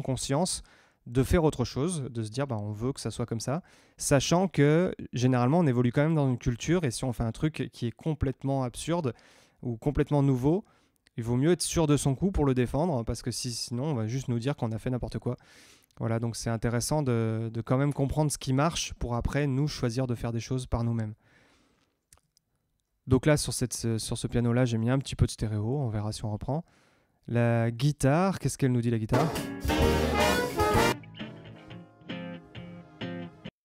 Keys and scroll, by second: 22.1 Tab, 27.6 Tab, 29.0 space, 33.4 space.